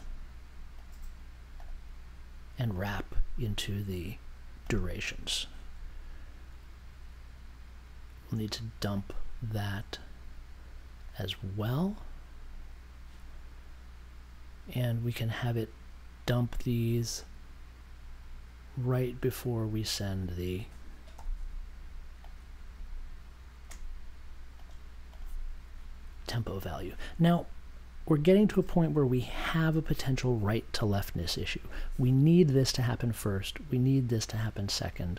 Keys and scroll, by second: 21.1 b.